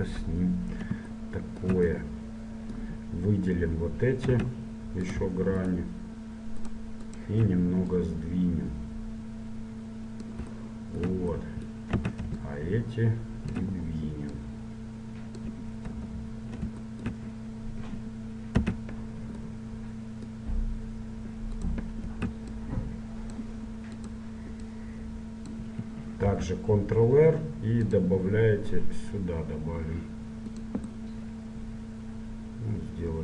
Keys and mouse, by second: 1.3-5.3 middle drag, 4.5 z, 5.3-9.1 right drag, 8.1-9.8 drag, 11.6-12.7 middle drag, 12.1 a, 12.7-14.5 drag, 14.7-16.3 drag, 16.1 KP_1, 18.7 a, 21.7-23.6 right drag, 22.7-24.5 drag, 24.1-26.1 right drag, 24.9-26.7 drag, 26.7 ctrl+r, 31.2-33.0 middle drag.